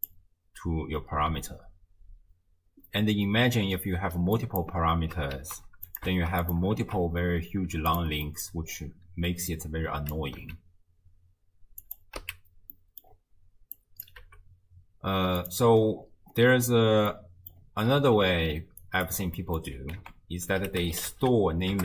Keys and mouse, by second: 4.4 drag, 5.4 ctrl+shift+d, 6.3 ctrl+shift+d, 6.8 ctrl+shift+d, 8.3 middle click, 9.5-10.2 drag, 10.4 x, 11.8 click, 12.2 x, 12.7 middle click, 13.8 click, 14.2 g, 17.1 middle click, 18.8 ctrl+right click, 19.4 click, 20.0 ctrl+a.